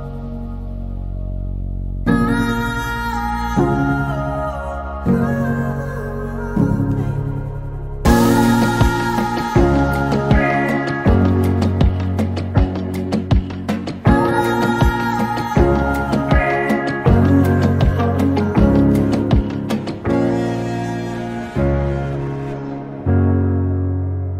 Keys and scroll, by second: 2.5 Delete, 7.5-9.6 typing, 16.6 Delete, 23.8 p.